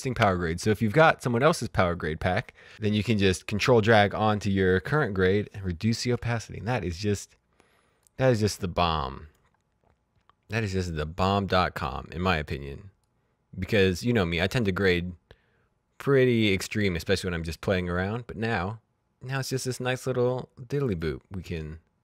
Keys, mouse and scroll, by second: 8.0 click, 12.9 click, 20.2 click, 21.5-22.0 scroll down 1.